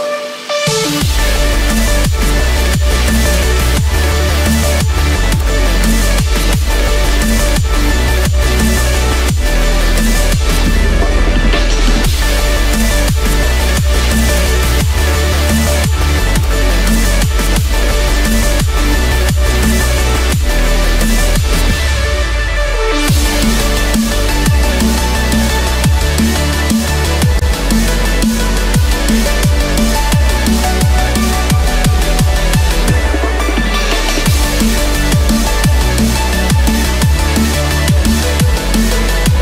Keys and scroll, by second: 1.2 ctrl+=, 17.0 ctrl+z, 18.1 Return, 18.8 Escape, 23.8 ctrl+z, 26.3 Escape, 31.0 Return, 31.5 Escape, 35.7 Return, 36.2 Escape.